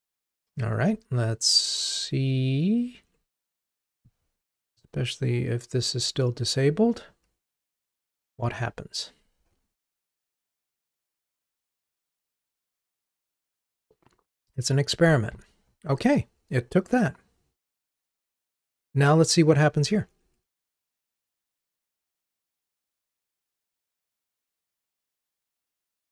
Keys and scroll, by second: 1.0 ctrl+Tab, 7.5 ctrl+r, 20.0 super+BackSpace, 20.6 ctrl+r.